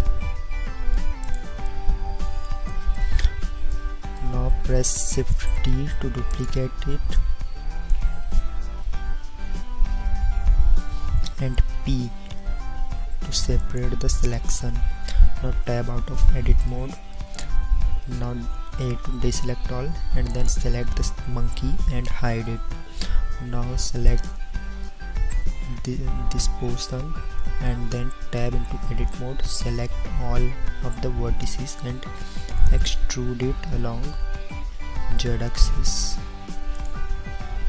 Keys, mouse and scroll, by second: 5.5 shift+d, 10.3 ctrl+z, 11.9 p, 15.7 Tab, 18.7 a, 22.7 h, 28.5 Tab, 29.7 a, 30.5 a, 30.9 a, 32.9 e, 37.4-37.6 middle drag.